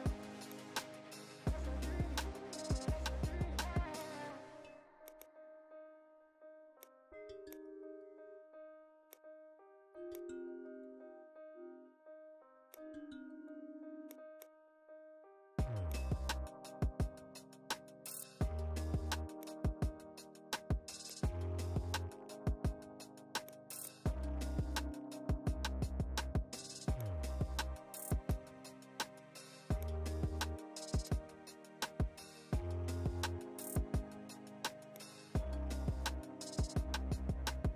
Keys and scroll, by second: 31.5 ctrl+z.